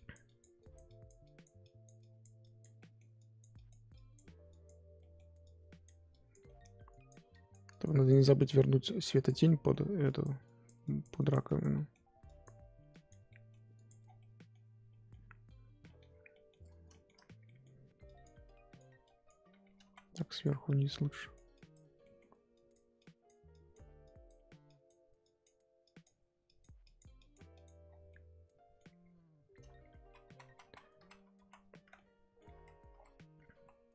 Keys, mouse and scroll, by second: 2.8 middle click, 3.1-5.0 drag, 5.0 middle click, 5.4-6.4 drag, 6.4 middle click, 6.9-9.4 drag, 9.4 middle click, 10.0-11.7 drag, 11.7 middle click, 12.2-13.3 drag, 13.3 middle click, 13.7 click, 14.0 scroll down 1, 14.2 middle click, 14.7 scroll down 1, 14.9 middle click, 15.2-15.8 scroll up 1, 15.8 middle click, 16.1 scroll up 3, 16.3 middle click, 16.6 scroll up 1, 16.9 shift+middle click, 17.2 scroll up 2, 17.4 middle click, 17.6-18.0 scroll down 1, 18.0-19.8 drag, 19.8 ctrl+z, 20.1-22.0 drag, 22.0 middle click, 22.5-27.8 drag, 27.8 scroll down 1, 28.1 middle click, 28.9-29.7 scroll up 1, 29.7 ctrl+z, 29.8 ctrl+z, 30.4 ctrl+z, 30.6 ctrl+z, 31.0 ctrl+z, 31.4 ctrl+z, 31.9 middle click, 32.5 ctrl+z, 32.9 ctrl+z, 33.5 ctrl+z.